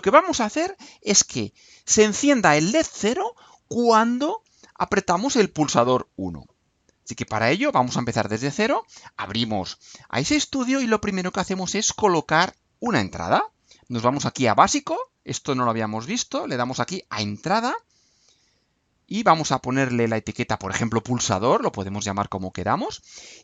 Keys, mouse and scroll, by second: 7.6 click, 17.1 click, 18.5 click, 20.2-22.0 typing.